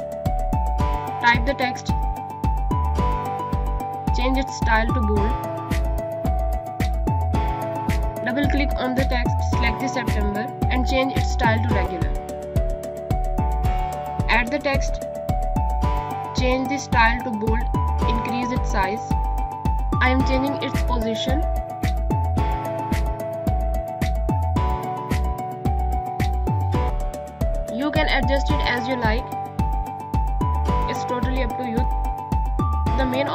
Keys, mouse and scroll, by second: 1.7-4.1 typing, 4.0 click, 13.6-15.3 typing, 15.6 click, 20.7 click, 22.1 click, 24.9 click, 26.2 shift+click, 27.2 click, 27.5 ctrl+z, 27.7 click, 28.2 ctrl+g, 28.5 click, 32.9 click.